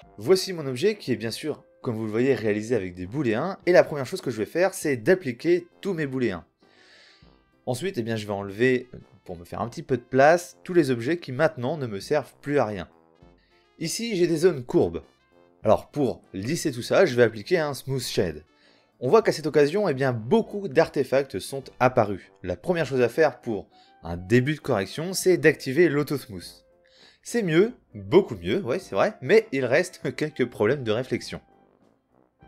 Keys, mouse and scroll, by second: 4.8 a, 5.3 space, 10.1-10.6 middle drag, 11.5 middle click, 12.6 middle click, 12.9 Delete, 15.7 right drag, 15.9 a, 16.0 a, 16.8 space, 25.7-27.7 middle drag, 29.0-30.6 middle drag.